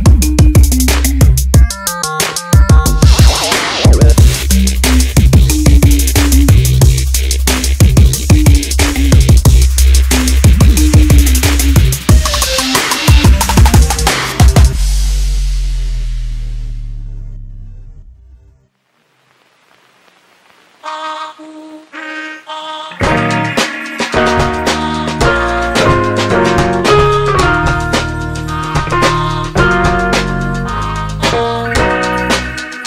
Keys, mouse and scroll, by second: 2.0 g, 4.5 g, 7.4 g, 30.6 click.